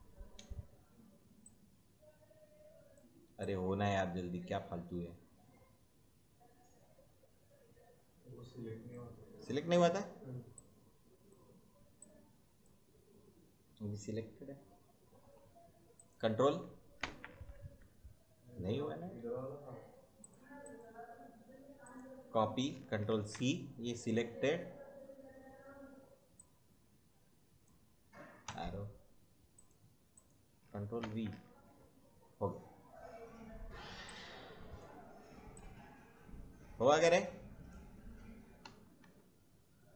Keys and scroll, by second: 14.1 Right, 16.9 ctrl+v, 23.0 ctrl+c, 28.4 Right, 31.0 ctrl+v, 38.6 Right.